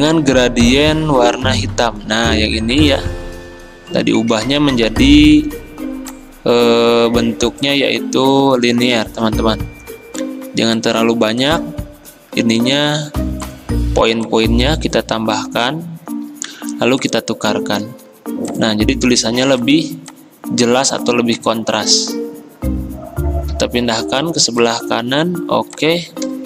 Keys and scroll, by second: 5.3 g, 18.2 v.